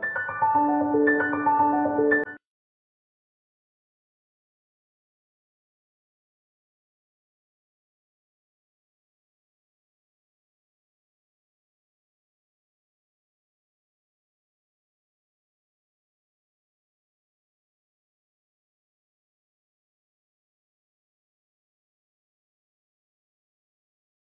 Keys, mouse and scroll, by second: 0.0 right click, 0.0 scroll down 1, 0.3 scroll up 1, 0.5-0.9 scroll down 1, 1.5 right click, 2.0-2.4 scroll down 1, 2.4 click, 3.9 scroll up 1, 4.6 click, 4.7-5.5 typing, 5.5 click, 5.7-6.3 scroll up 1, 6.3 click, 6.4 right click, 6.5 scroll down 1, 6.8 scroll up 1, 7.2 click, 7.5 right click, 7.7 click, 7.8 scroll down 1, 8.0-8.4 scroll up 1, 8.6 right click, 8.7 scroll down 1, 9.0 scroll up 1, 9.3 click, 9.4 scroll down 1, 9.5 scroll up 1, 10.2 click, 10.3 right click, 10.9 click, 11.0-11.6 scroll down 1, 11.6 click, 11.7-12.5 scroll down 1, 12.5 right click, 12.8 click, 13.0 right click, 13.7 scroll up 1, 14.2 click, 14.2 right click, 14.4 scroll down 1, 14.6-15.0 scroll up 1, 15.1 click, 15.2 right click, 15.9 click, 16.0 scroll down 1, 16.1-16.6 scroll up 1, 16.6 click, 16.7 right click, 16.8 scroll down 1, 17.0 scroll up 1, 17.8 click, 17.9-18.3 scroll down 1, 18.3 right click, 19.2 click, 19.2 scroll down 1, 19.4-19.8 scroll up 1, 19.8 click, 19.9 right click, 20.0 scroll down 1, 20.2 scroll up 1, 20.7-21.0 scroll down 1, 22.1 right click, 22.3 scroll down 1, 22.4 scroll up 1, 22.6 click, 22.7 right click, 23.0 scroll up 1, 23.2 click, 23.7 scroll down 1, 24.0 right click, 24.3 click.